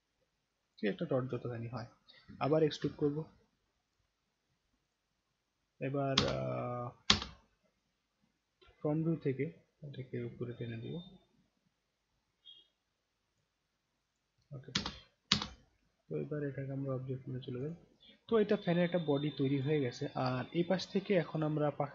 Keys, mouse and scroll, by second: 2.8 ctrl+e, 4.9 click, 6.2 space, 7.1 space, 7.5 scroll down 1, 8.0-8.3 middle drag, 8.6-9.0 alt+middle drag, 9.9-13.4 drag, 14.1 click, 14.7 space, 15.3 space, 16.2-17.3 right drag, 17.6 click, 18.4-19.6 alt+drag, 19.9 alt+scroll up 1, 20.4 scroll down 2, 21.4 click.